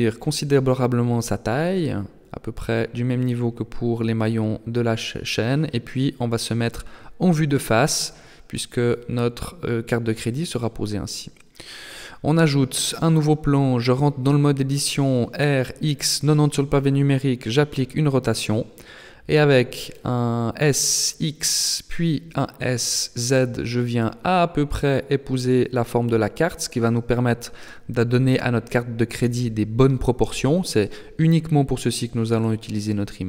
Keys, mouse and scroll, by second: 0.4 click, 2.4-2.9 scroll down 9, 5.0 KP_1, 8.4-9.4 scroll up 3, 9.4 shift+middle click, 10.8 shift+a, 13.2 Tab, 14.6 r, 18.0 z, 20.4 s, 24.2 s, 26.6-26.9 scroll up 1, 27.8 click, 29.2-31.0 scroll down 10, 31.4 shift+click.